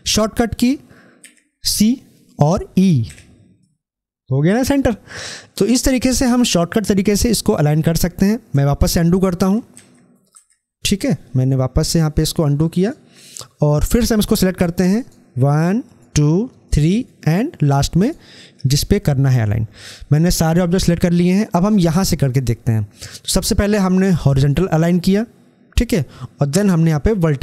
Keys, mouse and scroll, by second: 1.1 c, 8.3 e, 24.2 click.